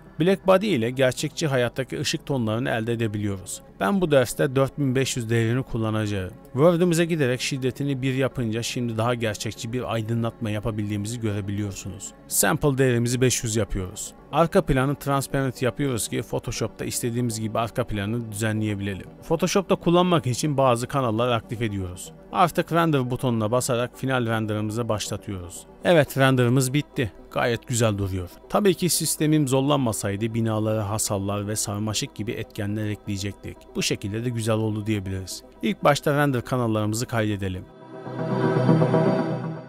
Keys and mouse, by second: 2.2-3.1 drag, 3.4-5.1 drag, 5.1 KP_0, 6.4-7.0 drag, 8.0-9.1 drag, 12.3-14.2 drag, 14.3 click, 16.3-19.1 drag, 19.6 click, 20.0 click, 20.3 click, 21.1 click, 21.6 click, 23.6-24.6 drag, 27.1 middle click, 27.8 middle click, 28.8 ctrl+space, 29.9 click, 30.7-31.7 middle drag, 32.1 middle click.